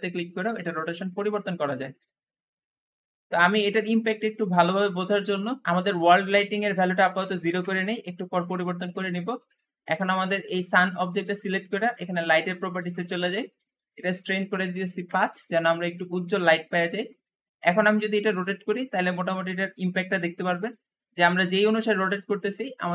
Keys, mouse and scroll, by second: 1.6 ctrl+z, 1.7 ctrl+z, 5.5 click, 5.7-8.8 drag, 6.9 typing, 7.3 Return, 7.5 Return, 12.3 click, 14.0-17.0 drag, 14.6 5, 14.9 Return, 17.3 r, 17.5 r, 21.0-22.9 typing.